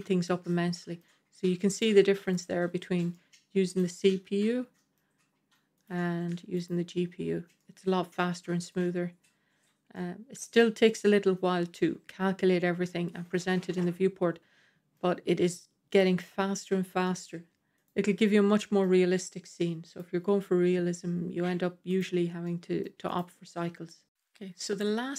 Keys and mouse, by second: 1.7-2.4 drag, 3.0-4.9 middle drag, 5.7-6.8 drag, 7.5-8.6 middle drag, 9.8-10.5 middle drag, 13.4-14.9 middle drag, 17.0-17.7 middle drag, 17.7 click, 18.2-18.7 middle drag, 19.8 click, 22.0 click, 22.4-22.7 middle drag, 23.0 click, 24.7-25.1 middle drag.